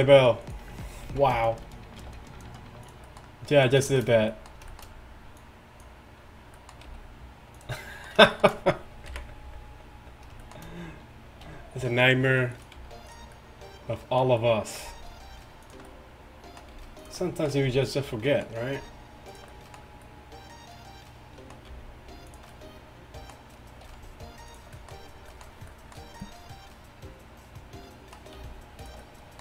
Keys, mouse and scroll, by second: 1.1 z, 2.1 g, 9.1 KP_1, 10.2 KP_1, 11.5 r, 12.8 g, 14.9 g, 17.0 g, 17.9 g, 18.9 r, 21.7 g, 23.9 r, 25.2 r, 28.4 g.